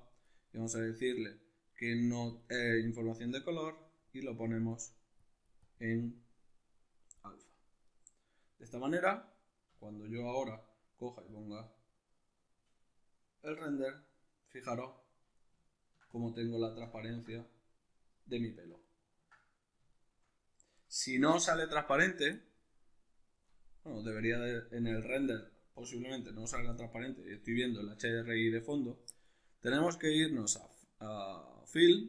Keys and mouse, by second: 2.7-3.6 middle drag, 3.6 click, 4.8 click, 5.2-7.5 drag, 7.5-23.5 middle drag, 9.3 z, 23.5 click, 28.2-30.2 middle drag, 30.2-32.0 drag.